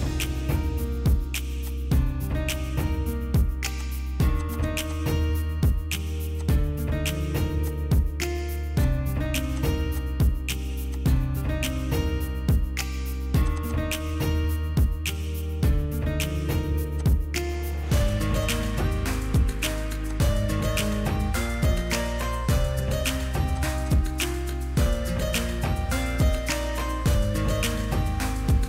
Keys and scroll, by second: 7.7 m, 8.1 p, 9.7 m, 13.1 Return, 13.1 typing, 14.3 ctrl+x, 14.3-15.6 typing, 14.7 Escape, 14.8 Escape, 16.4 ctrl+g, 18.0 ctrl+g, 21.8 ctrl+g.